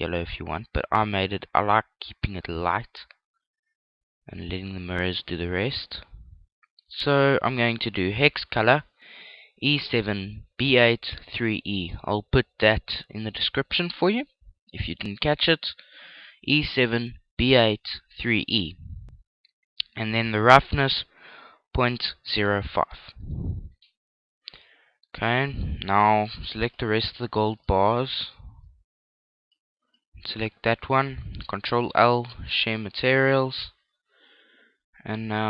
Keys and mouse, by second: 19.5 click, 23.3 click, 25.7-30.7 right drag, 30.8 ctrl+l, 33.5-35.3 middle drag.